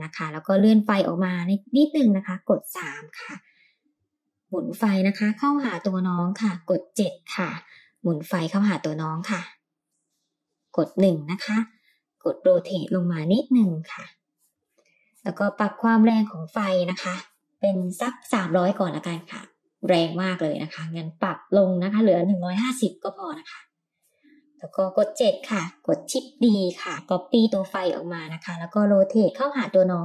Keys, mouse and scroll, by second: 1.7-2.2 middle drag, 2.3-3.0 scroll down 2, 3.4 KP_3, 4.2 r, 6.4 g, 6.6 r, 7.0 KP_7, 7.9 r, 11.0 KP_1, 12.1 r, 13.0 g, 15.4-20.1 drag, 18.4 KP_0, 20.9 click, 21.3-23.2 drag, 24.6 KP_7, 26.3 shift+d, 28.9 r.